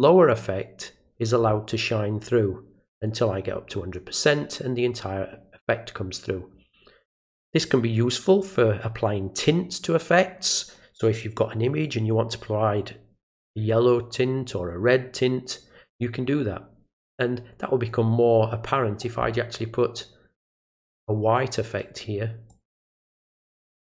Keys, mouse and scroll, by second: 2.2-3.9 drag, 8.4-9.4 drag, 17.1-17.9 drag, 19.9-21.8 drag, 22.5-23.5 drag.